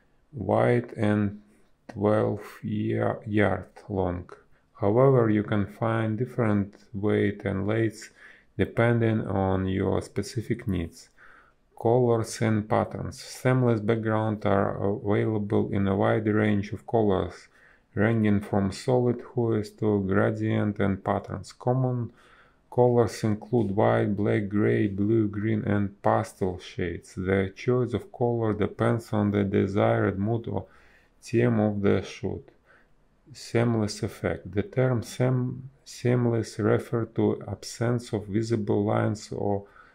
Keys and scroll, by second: 0.8 space, 1.5 b, 1.6 space, 6.6 space, 8.5 ctrl+z, 8.8 ctrl+z, 9.2 space, 12.6 space, 16.2 space, 18.7 space, 19.9 space, 22.6 space, 25.4 space, 29.9 space, 30.9 space, 32.6 ctrl+z, 34.0 a, 36.7 space, 39.5 space.